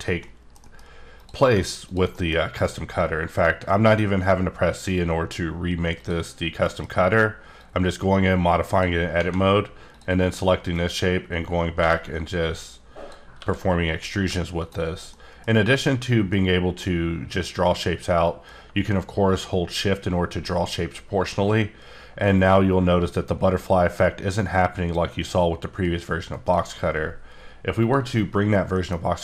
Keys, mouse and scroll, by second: 0.2 middle click, 0.9 double middle click, 1.2 click, 1.9 click, 2.1 middle click, 2.6 right click, 5.9 click, 6.6 F9, 7.5 click, 9.9 click, 10.7 click, 11.8 g, 13.4 e, 14.0 click, 15.1 middle click, 16.3 middle click, 18.2 click, 25.8 shift+right click, 27.8 click, 28.7 middle click.